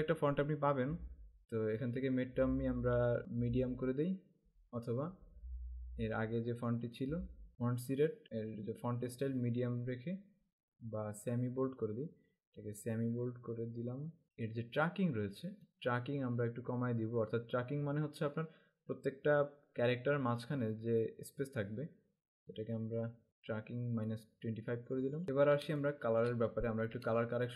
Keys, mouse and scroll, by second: 1.9 Down, 3.2 Up, 6.9 click, 14.2 click, 15.6 click, 24.2 click, 25.2 scroll up 1, 25.7 space, 25.8 click, 26.2 space, 26.6-27.1 alt+scroll up 2, 27.1 space, 27.2 click.